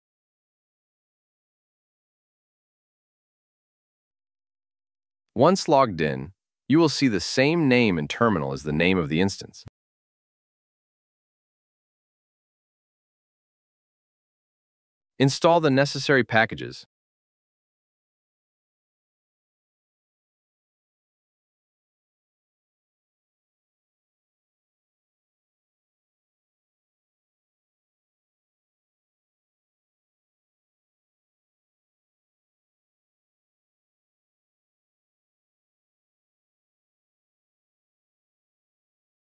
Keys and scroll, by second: 14.3 super+v.